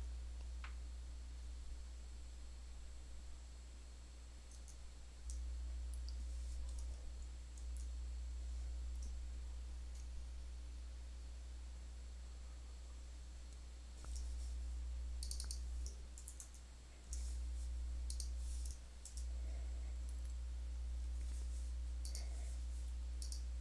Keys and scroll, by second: 4.3 super+Tab, 7.4 super+w, 16.1 super+c, 16.3 Tab, 18.9 super+v.